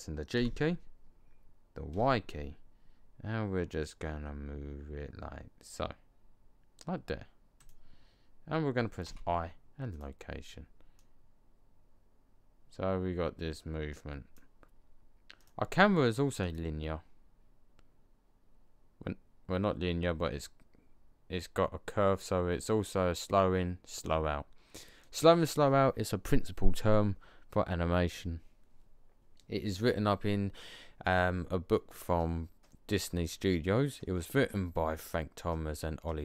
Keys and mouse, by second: 0.2 g, 8.9 i, 12.3-13.1 middle drag, 15.3-15.6 drag.